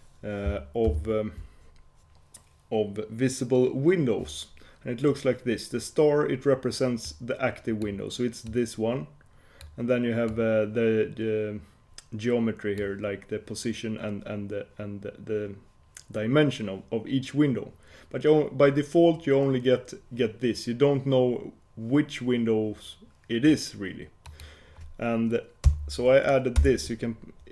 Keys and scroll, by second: 1.0 ctrl+super+k.